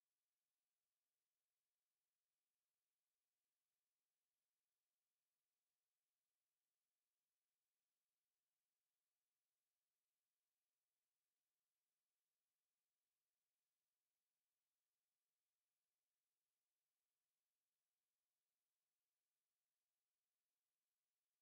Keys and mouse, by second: 4.4 click, 5.1 click, 6.1 alt+click, 6.4 alt+right click, 6.8 right click, 7.3 click, 8.3 right click, 9.2 click, 10.4 alt+right click, 11.1 alt+click, 11.6 shift+right click, 12.7 alt+middle click, 13.3 alt+click, 14.8 click, 19.8 alt+click, 20.6 alt+click.